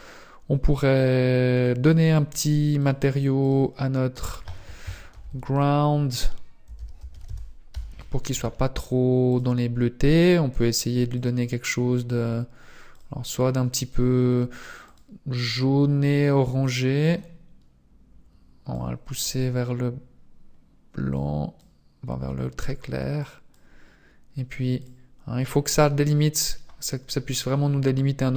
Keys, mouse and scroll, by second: 1.7 right click, 2.9 click, 3.5 click, 4.2 click, 9.4 click, 11.7 click.